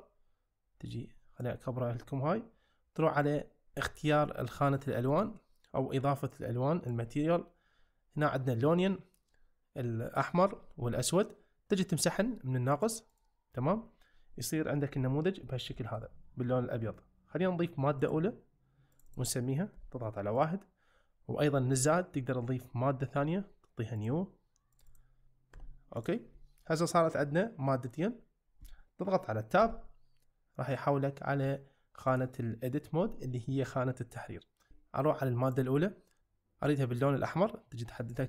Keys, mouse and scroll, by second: 1.0 click, 5.2 click, 6.4 click, 12.7 click, 14.9 `, 15.7 shift+middle drag, 18.0 click, 18.9-20.4 drag, 24.0 click, 24.7 click, 25.0-26.0 drag, 29.6 Tab, 32.2-34.0 drag, 34.5 shift+middle click, 35.4 click.